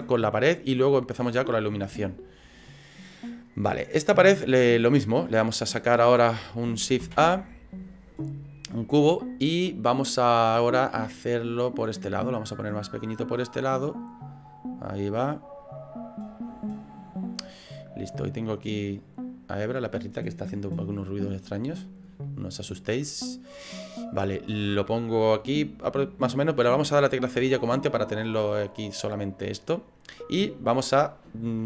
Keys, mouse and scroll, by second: 0.5 click, 0.5 scroll down 5, 1.5 scroll down 3, 2.0 shift+middle click, 2.6 middle click, 7.1 shift+a, 11.8 click, 13.1 click, 14.2-14.5 scroll up 7, 14.8 scroll down 1, 15.6 click, 18.4 click, 21.7 click, 22.2 middle click, 23.6 click, 25.0 middle click, 27.4 /, 27.8 scroll down 4, 28.2 middle click, 29.9 middle click.